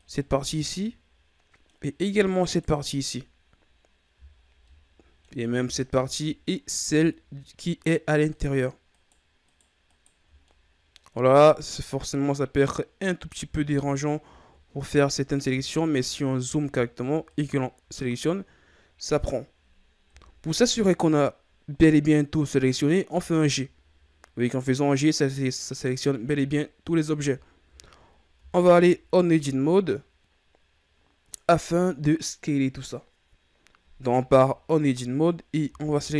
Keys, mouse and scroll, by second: 0.4 scroll up 1, 0.5-2.4 middle drag, 2.4 shift+right click, 4.4 shift+scroll down 3, 4.6-5.7 middle drag, 5.7 shift+right click, 6.2 middle click, 6.6-6.9 scroll up 3, 8.2 shift+right click, 8.8 shift+right click, 9.4 shift+right click, 9.8 shift+right click, 10.4-11.2 middle drag, 11.2-11.8 scroll down 1, 11.8-13.5 middle drag, 13.5-13.9 shift+scroll down 2, 13.9-14.3 scroll up 5, 14.7-17.2 scroll up 7, 17.2 shift+right click, 17.9-20.0 scroll down 17, 20.1 KP_1, 23.0 g, 25.8-26.4 scroll down 4, 27.5-28.3 ctrl+scroll up 1, 28.3 Tab, 30.7-33.7 scroll up 2, 35.9 a.